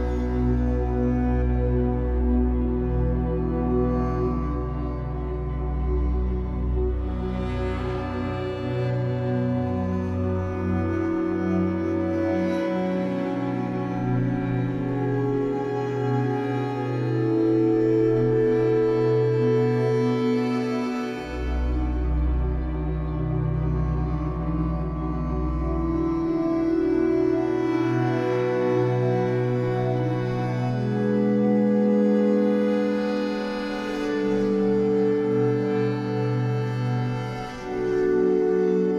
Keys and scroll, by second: 3.3 Delete, 13.8 Escape, 14.1 3, 16.2 e, 16.9 w, 19.2 r, 21.8 w, 29.8 r, 31.5 w, 33.5 Escape, 34.3 w, 38.2 2.